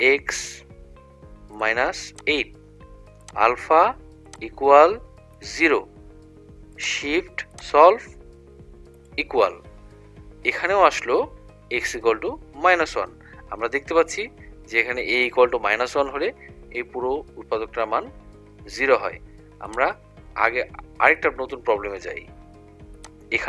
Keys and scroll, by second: 1.7 -, 2.2 8, 5.4 0, 9.1 =.